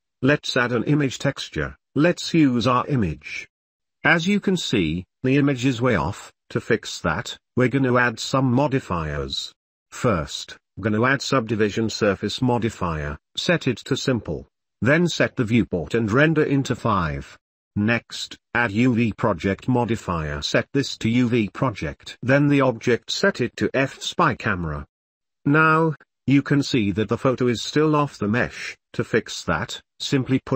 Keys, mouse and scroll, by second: 0.0 click, 0.1 middle click, 0.8 click, 9.2-11.1 drag, 13.4 click, 14.0 click, 15.6-17.9 drag, 20.4-21.4 drag, 22.6 click, 23.8-24.9 drag, 26.9-27.3 drag, 29.1-29.5 shift+middle drag, 30.3 ctrl+s.